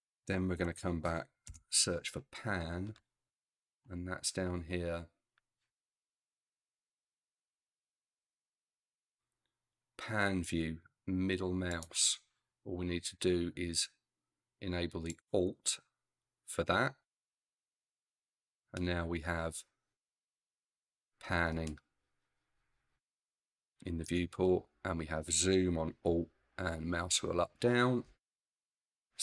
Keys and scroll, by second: 0.6 p, 1.1 a, 1.5 n.